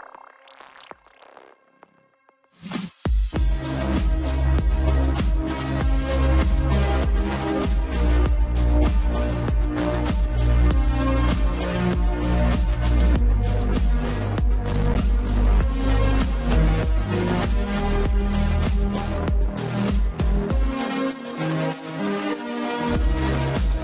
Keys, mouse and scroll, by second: 1.6 ctrl+z, 3.5 scroll down 2, 4.0-6.9 middle drag, 6.9 shift+click, 7.9 ctrl+click, 9.0 ctrl+click, 9.6 shift+click, 11.5 KP_1, 15.2 r, 16.7 ctrl+z, 18.0 shift+d.